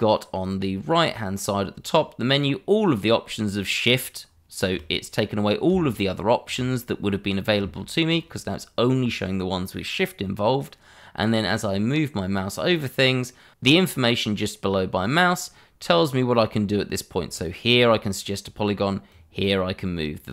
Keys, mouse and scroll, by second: 19.1 shift+click, 20.1 click.